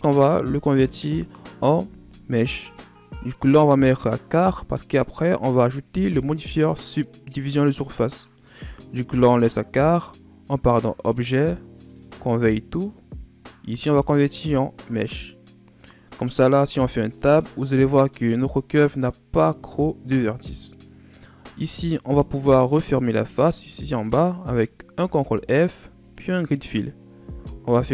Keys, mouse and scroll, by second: 11.0-14.0 drag, 15.9-16.7 scroll up 2, 16.7 Tab, 17.7-18.5 scroll up 2, 18.5-19.8 scroll down 2, 20.8 middle click, 21.4-22.2 scroll up 3, 22.7 alt+right click, 24.9 ctrl+f, 27.5 ctrl+r.